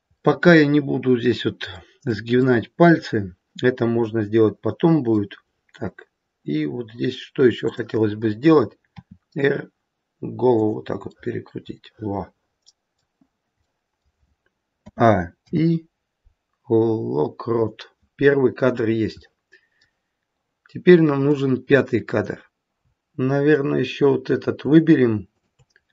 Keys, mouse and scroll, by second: 0.1 middle click, 1.7 middle click, 2.3 middle click, 7.6 click, 8.9 r, 11.1 middle click, 13.6 middle click, 14.7 a, 15.3 i, 18.7-19.4 scroll down 2, 19.2 middle click, 21.3 click.